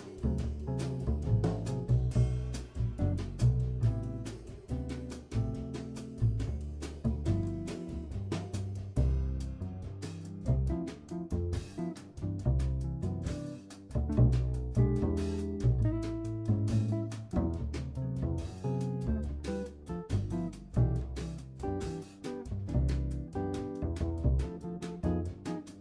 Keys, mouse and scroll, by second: 0.7 g, 3.0 Tab, 3.2 middle drag, 3.4-3.8 scroll up 8, 3.8-4.6 scroll down 1, 4.8 Tab, 5.3 s, 7.5 g, 12.4-13.4 scroll down 4, 13.4 middle click, 14.3-14.8 scroll down 3, 14.8-17.8 middle drag, 17.8 Tab, 18.5 ctrl+s, 19.2-20.0 scroll down 5, 20.0 scroll up 2, 22.8 click, 23.5-25.0 drag, 25.0-25.6 scroll up 2, 25.6-25.8 shift+middle drag.